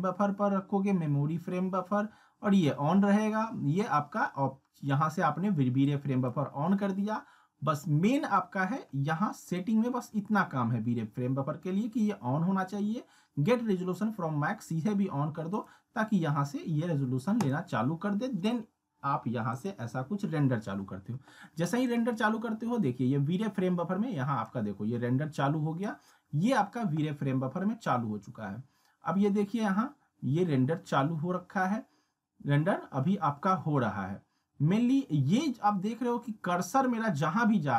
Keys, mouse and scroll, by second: 5.8-6.5 drag, 9.5 click, 15.5 click, 21.9-24.7 drag.